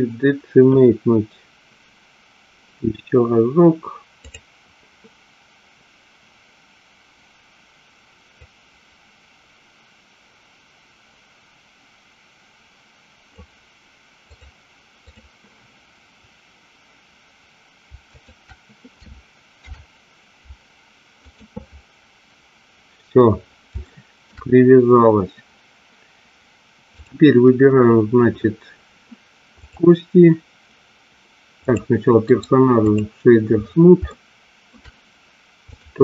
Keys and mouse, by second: 8.6-13.5 drag, 14.3-15.5 drag, 18.3 shift+click, 19.8 ctrl+p, 23.9 shift+middle click, 29.6 click, 31.8 click, 32.3 right click, 34.1 shift+middle click.